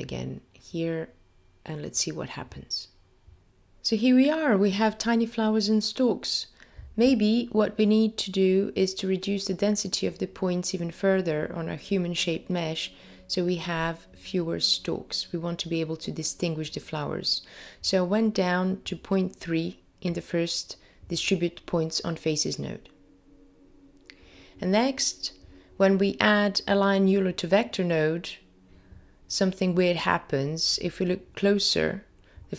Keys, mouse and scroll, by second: 16.9-17.4 scroll up 1, 17.4-18.3 scroll up 1, 18.8 middle click.